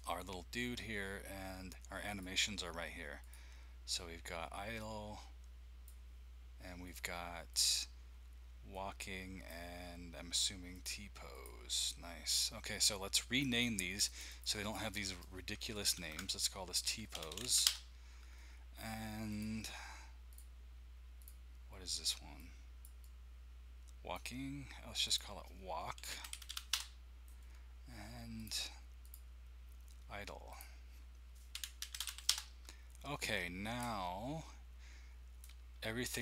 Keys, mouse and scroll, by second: 2.0 click, 4.7-5.9 drag, 6.8 click, 7.5 click, 10.7 click, 11.4 click, 13.4 click, 13.6 click, 14.0 click, 14.2 click, 14.4 click, 14.7 click, 14.9 click, 16.0 ctrl+a, 16.6-17.9 typing, 19.3-20.3 drag, 20.4 click, 21.3 click, 22.9 click, 24.2-26.0 drag, 25.7-27.0 typing, 28.3 click, 29.0 click, 29.2 middle click, 30.5 click, 31.3-32.5 typing, 32.2 middle click, 34.0 middle click.